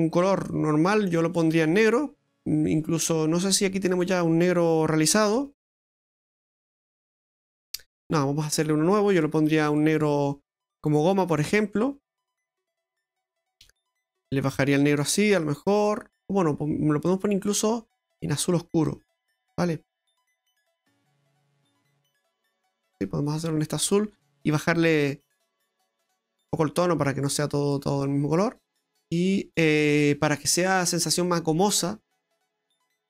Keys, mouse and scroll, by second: 1.3 click, 3.9 click, 6.9 middle click, 9.1 click, 9.6 click, 10.7 click, 13.3 click, 22.9 middle click, 24.3 click, 25.3 click, 28.1 middle click, 32.1 click, 32.9-33.0 scroll down 13.